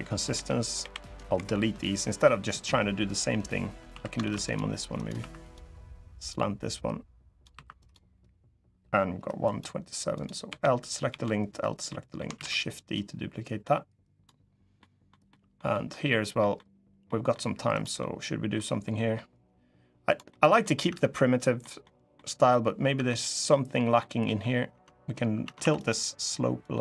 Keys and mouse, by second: 0.6 l, 1.1 Delete, 2.2 click, 3.8 2, 3.9 ctrl+r, 4.7 click, 4.9 2, 5.1 click, 6.0-7.2 drag, 7.3 3, 7.6 click, 9.3 click, 10.2 l, 10.8 l, 11.6 middle click, 12.1 shift+d, 12.7-14.0 drag, 14.5 click, 15.0 click, 15.4 click, 16.1 middle click, 16.8 middle click, 17.5 middle click, 17.7 middle click, 18.6 middle click, 20.0 middle click, 20.6 Tab, 21.3 middle click, 21.9 middle click, 22.7 Tab, 23.4 middle click, 24.0 click, 24.4 Tab, 25.2 Tab, 25.3 2, 25.5 click, 26.4 click.